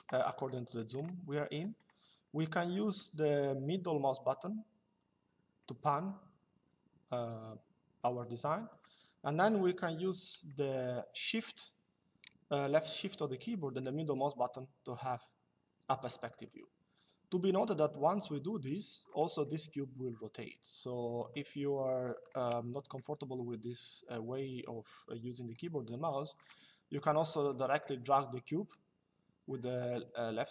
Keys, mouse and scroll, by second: 2.7 middle click, 10.2 shift+middle click, 21.0 click, 22.6 shift+middle click, 27.0 click, 29.7 click.